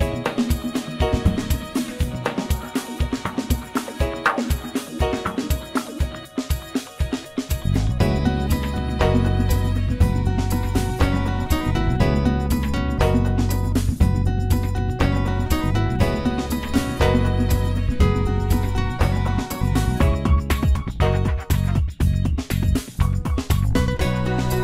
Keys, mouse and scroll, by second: 1.8-2.2 scroll down 2, 2.2-4.8 middle drag, 4.8 click, 5.3-7.7 drag, 7.7-8.7 scroll up 1, 8.7 KP_Divide, 9.5-10.1 scroll down 1, 10.1 s, 11.3 scroll up 3, 11.9 s, 13.6-14.1 scroll up 2, 14.5 Tab, 15.0 click, 15.5 middle click, 16.1 shift+click, 16.6-17.8 middle drag, 17.8-19.1 drag, 19.1 middle click, 19.9-20.8 scroll up 1, 20.8 i, 24.4 e.